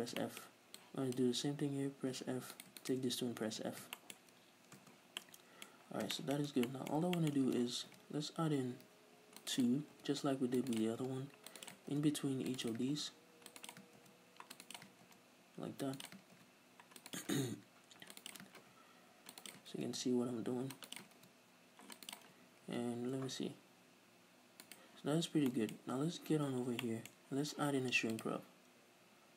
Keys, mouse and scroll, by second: 0.0 f, 0.2 shift+middle click, 0.8 click, 2.2 f, 2.6 right click, 2.9 shift+right click, 3.6 f, 3.7 scroll down 2, 4.0 shift+middle click, 4.2-4.9 scroll up 3, 5.0-9.7 middle drag, 5.0 scroll down 1, 6.6 Tab, 7.9 ctrl+r, 9.7 right click, 10.0 ctrl+r, 10.0 middle click, 10.8 click, 10.9 right click, 11.1 ctrl+r, 11.7 click, 11.8 right click, 11.9 ctrl+r, 12.7 click, 12.8 right click, 13.0 ctrl+r, 13.7 click, 13.9 right click, 14.0 ctrl+r, 14.8 click, 14.9 right click, 15.1 ctrl+r, 16.1 click, 16.2 right click, 16.4 ctrl+r, 17.2 click, 17.4 right click, 17.6 ctrl+r, 18.4 right click, 18.7 ctrl+r, 19.6 click, 19.7 right click, 19.8 ctrl+r, 21.1 click, 21.2 ctrl+r, 22.2 right click, 22.7 ctrl+r, 24.8 right click, 25.6-28.2 middle drag, 26.5 a, 26.7 scroll down 2, 28.2-29.3 drag.